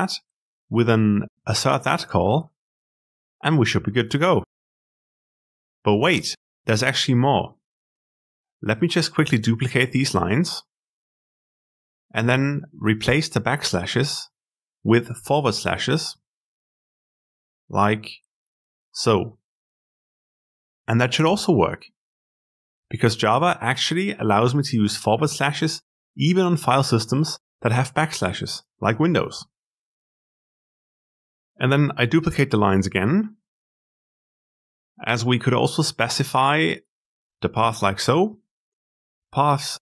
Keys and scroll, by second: 13.2 ctrl+w, 14.7 ctrl+r, 16.2 alt+s, 18.2 alt+r.